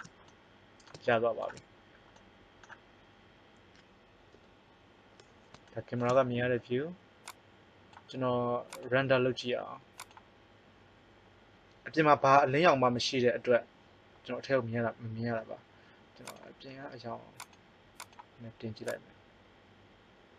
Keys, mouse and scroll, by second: 4.3 KP_0, 7.2 click, 8.5 click, 10.1 click, 16.2-19.2 drag, 19.5 click.